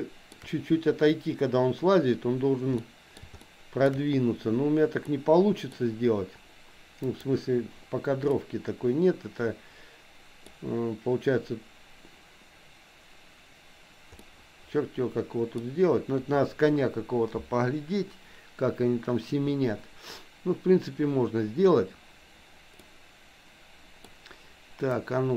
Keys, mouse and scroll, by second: 2.8 middle click, 3.4 shift+middle click, 5.0 middle click, 7.0 click, 8.4-10.5 middle drag, 14.3-15.7 middle drag, 22.8-24.0 middle drag, 24.9-25.3 drag.